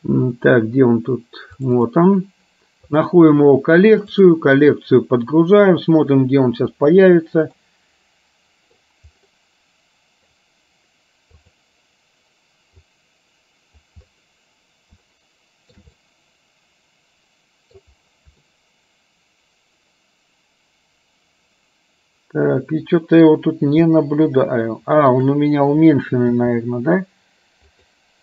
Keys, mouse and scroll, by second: 7.7-8.9 middle drag, 13.0 click, 15.2 shift+middle click, 16.2-17.9 middle drag, 18.5-23.4 middle drag, 24.7 shift+middle click, 26.4 s.